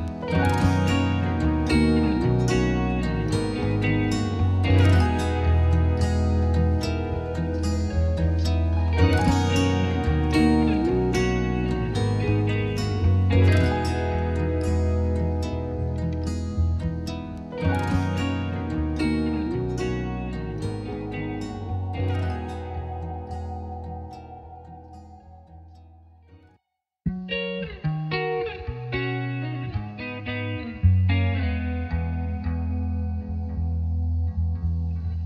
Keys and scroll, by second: 8.0-9.0 typing, 9.1 Return, 21.4-22.3 typing, 22.6 Return.